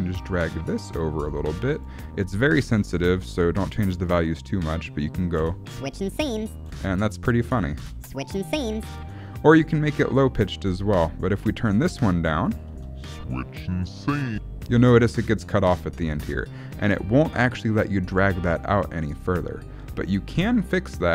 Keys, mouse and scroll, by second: 1.7 click, 5.4 space, 6.7 space, 7.4 click, 7.8 space, 9.0 space, 9.7 click, 12.5 click, 12.7 space, 14.7 space, 16.7 click.